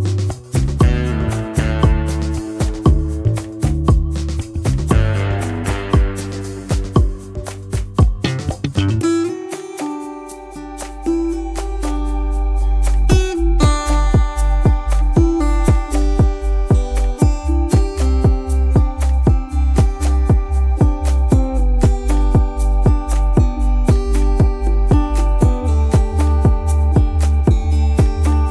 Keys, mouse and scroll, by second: 4.0 space, 4.8 ctrl+shift+], 5.3 space, 13.5 shift+click, 23.4 ctrl+z, 27.9 shift+click.